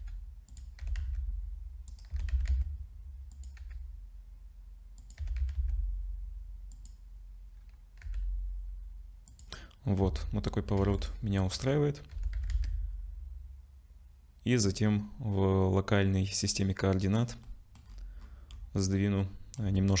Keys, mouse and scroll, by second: 0.0 g, 0.8 r, 2.1 r, 3.6 g, 5.2 r, 8.0 g, 10.0 Tab, 10.8 2, 10.9 click, 12.1 g, 17.4 middle click, 17.8-20.0 scroll down 17, 18.9 middle click.